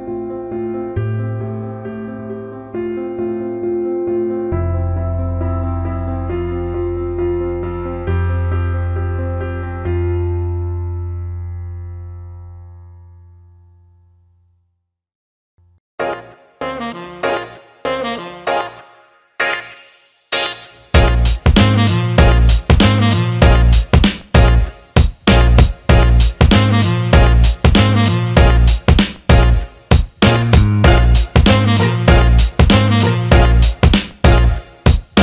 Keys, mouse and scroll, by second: 7.3 shift+d, 8.9 alt+middle click, 10.1-11.5 drag, 11.7 alt+middle click, 13.1 click, 14.0 alt+middle click, 14.8 click, 15.4 alt+shift+middle click, 15.6 alt+middle click, 17.3 alt+shift+middle click, 18.8 shift+d, 20.6-21.6 drag, 21.8 alt+middle click, 23.8 alt+shift+middle drag, 24.8-26.5 drag, 27.3 alt+shift+middle click, 33.7 click, 33.9 click, 34.3 click, 34.7 click.